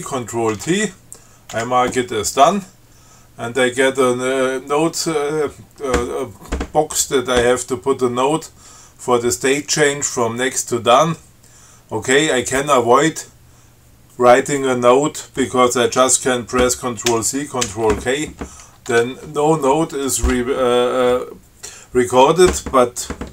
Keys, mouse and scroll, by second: 0.8 ctrl+t, 1.8 d, 17.3 ctrl+c, 17.9 ctrl+k, 19.1 Tab.